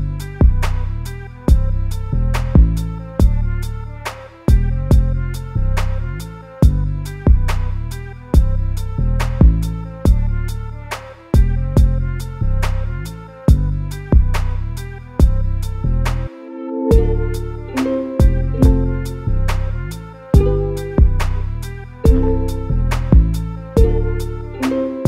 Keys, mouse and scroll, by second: 3.2 3, 3.5 click, 4.2-7.2 middle drag, 9.1-10.4 middle drag, 10.4 ctrl+click, 10.8-12.1 middle drag, 12.1 ctrl+click, 12.5-13.9 middle drag, 13.9 shift+click, 14.3-15.7 middle drag, 15.7 ctrl+click, 16.1-18.5 middle drag, 18.5 ctrl+click, 18.8-20.0 middle drag, 20.0 ctrl+click, 20.5-22.7 middle drag, 22.7 ctrl+KP_Add, 23.6-25.0 middle drag.